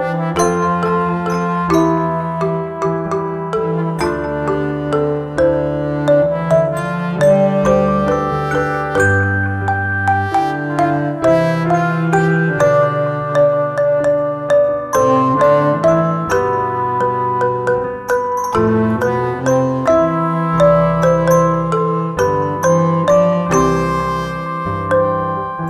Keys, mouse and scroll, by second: 0.7-8.9 drag, 8.9-11.6 drag, 12.7 right click, 13.8 click, 15.8 click, 23.6 click.